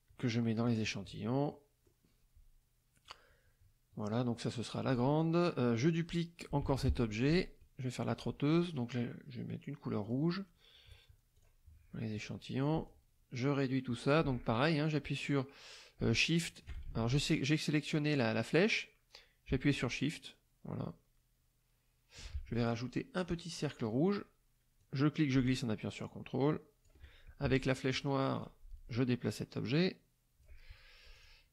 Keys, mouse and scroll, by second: 0.6 click, 1.5 middle click, 4.7 click, 6.6 ctrl+d, 7.2 ctrl+click, 10.0 click, 11.3 click, 12.8 shift+click, 16.9 ctrl+shift+z, 18.4-22.3 drag, 23.2 click, 23.5 middle click, 24.7-27.0 drag, 28.4 click, 29.2-30.6 drag, 31.1 shift+click.